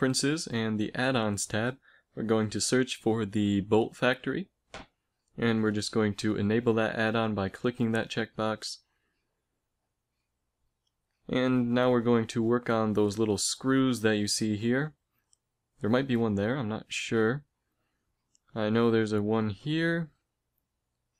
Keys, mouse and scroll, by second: 8.6-10.0 middle drag, 10.6 middle click.